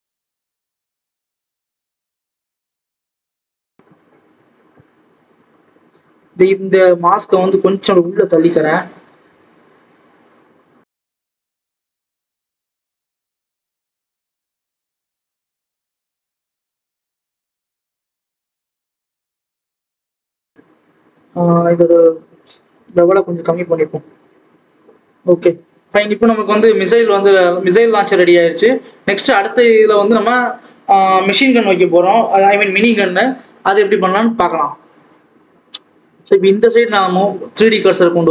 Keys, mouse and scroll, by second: 0.5 click, 2.4 scroll down 2, 2.7 Tab, 3.0-3.4 scroll up 2, 3.4 click, 5.2 click, 5.9-6.7 scroll down 1, 6.7 click, 7.1-7.6 scroll up 2, 7.6 click, 8.4 g, 11.1-11.6 scroll down 1, 11.6 click, 12.1-12.4 scroll up 2, 12.7 click, 13.0 scroll up 1, 13.1 Tab, 13.3-13.7 scroll down 1, 13.7 a, 13.8 s, 15.8 scroll down 2, 15.9 Tab, 16.9-17.9 drag, 17.9 KP_0, 18.4 click, 19.4-20.0 scroll up 2, 19.7 right click, 20.0 scroll down 2, 20.2 alt+a, 20.5 click, 21.2-23.1 scroll up 2, 23.1 KP_0, 23.8-24.5 scroll down 6, 24.5 alt+a, 25.3 click, 26.1-27.4 scroll down 5, 27.4 click, 35.4-35.9 scroll up 5, 36.0-36.7 scroll up 2, 36.7 click, 38.1 click.